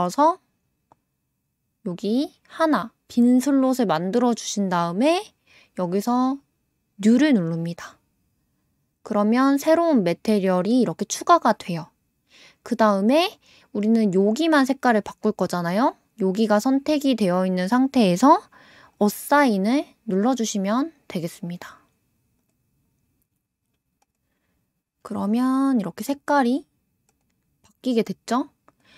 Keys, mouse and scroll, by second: 18.9 click, 22.4 click, 24.0 click, 25.1 click, 25.9 click, 26.5 click, 27.1 click, 28.7 click.